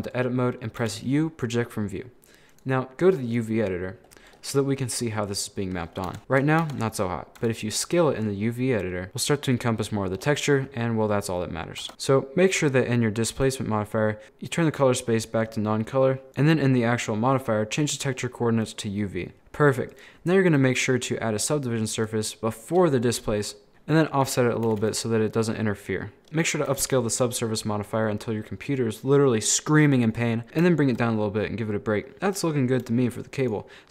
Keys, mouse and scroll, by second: 0.8 scroll down 1, 0.8 u, 2.5-4.1 drag, 4.1 a, 4.1 scroll down 4, 4.3 scroll up 5, 5.4 scroll down 2, 5.6-6.1 scroll up 6, 6.1 Tab, 6.2 shift+middle click, 6.6 Tab, 7.4 s, 9.1 scroll up 6, 9.2 scroll down 7, 9.9 scroll down 4, 10.2-11.1 scroll up 1, 11.1-11.8 scroll down 2, 11.8 Tab, 13.5-15.7 drag, 16.3 click, 17.7-19.3 drag, 19.3-19.8 scroll down 3, 19.9-22.4 drag, 22.4 scroll up 2, 22.5 scroll down 1, 23.7 g, 24.8 a, 25.0-25.8 scroll up 9, 25.9-26.7 scroll down 11, 26.7 a, 26.9 a, 27.0-27.4 scroll up 12, 27.7-28.5 scroll down 13, 28.5-30.4 scroll up 3, 30.4 scroll up 9, 30.6 shift+middle click, 31.1 scroll down 1, 31.2 middle click, 31.6 scroll down 1, 31.7 middle click, 32.4 scroll down 1, 32.5 middle click, 32.7 scroll up 1, 32.9 shift+middle click, 33.4 right click.